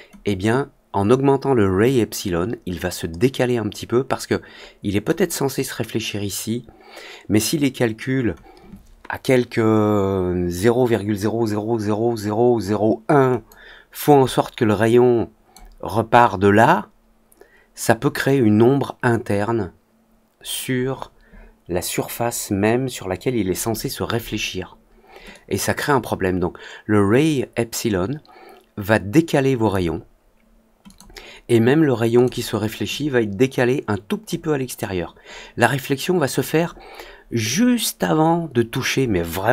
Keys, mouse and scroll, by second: 0.2-5.0 drag, 13.4-15.4 drag, 25.2-29.6 drag, 30.8 click, 32.1 click, 32.9-34.2 drag.